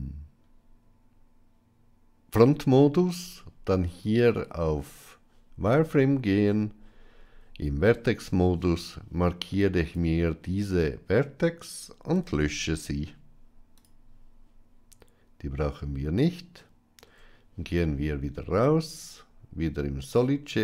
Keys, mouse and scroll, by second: 6.2 Tab, 8.8-9.8 drag, 13.7 x, 16.9 Tab, 19.9 click.